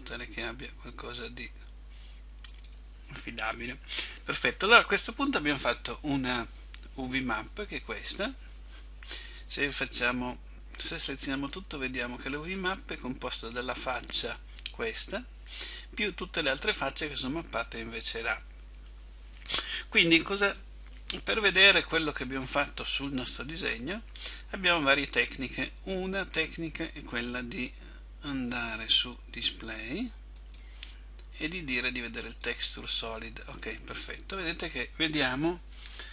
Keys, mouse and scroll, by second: 11.6 a, 32.4 click.